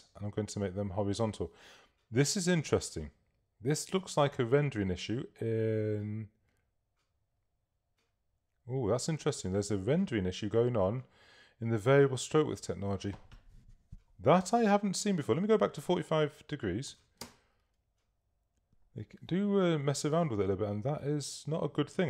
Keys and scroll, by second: 16.8-17.6 typing.